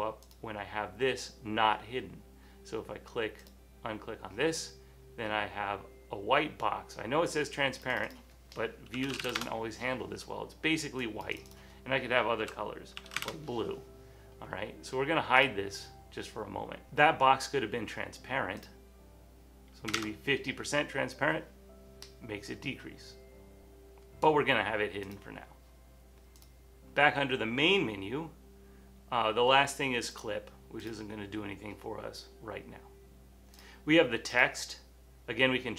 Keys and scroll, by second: 8.8-9.8 typing, 11.7-14.4 typing, 19.8-20.5 typing.